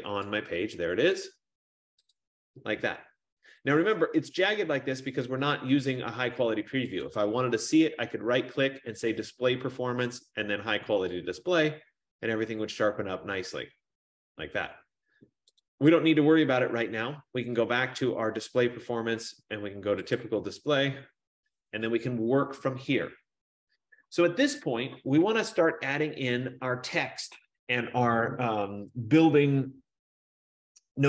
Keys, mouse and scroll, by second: 0.3 click, 2.7 click, 7.5 right click, 11.4 click, 15.9 right click, 20.5 click.